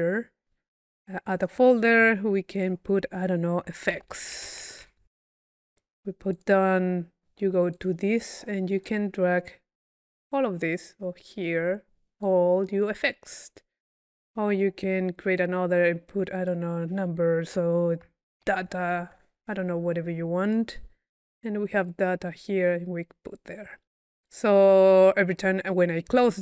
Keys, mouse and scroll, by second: 1.5 click, 2.0 click, 2.2 click, 2.6 click, 4.6 c, 6.4 click, 7.8 click, 8.9-10.2 drag, 10.7 click, 12.2-13.2 drag, 13.3 click, 14.5 right click, 15.5 click, 16.4 click, 17.6 click, 20.5 click, 21.8 click, 22.7 click, 24.3 click.